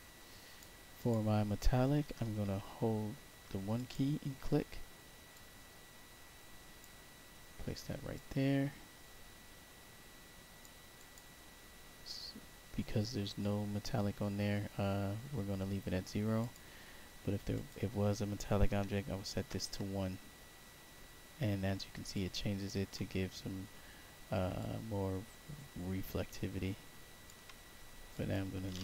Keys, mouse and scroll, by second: 0.9 click, 3.4 1, 3.7 click, 5.2-6.7 drag, 8.1-10.5 drag, 10.9 click, 11.6 middle click, 11.6 scroll, 16.3 click, 17.5 click, 18.6 1, 19.4 Tab, 22.1 alt+click, 24.5-27.2 alt+drag, 28.0 click.